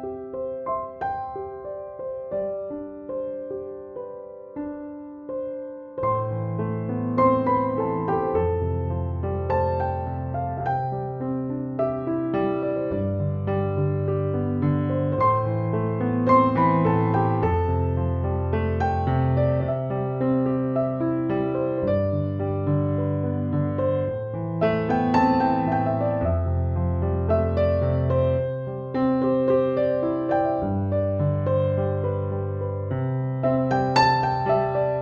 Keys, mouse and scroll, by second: 6.9-11.8 drag, 16.9 click, 17.0 click, 25.3 click, 28.7 click, 31.4 click, 31.5 click.